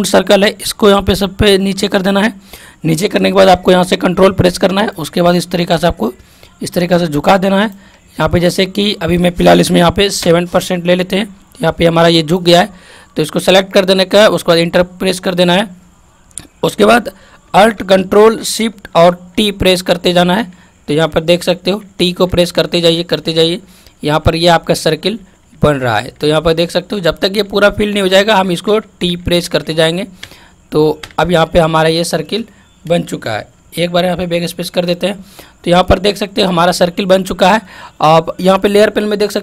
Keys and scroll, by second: 19.3 ctrl+alt+shift+t, 33.8 ctrl+alt+z.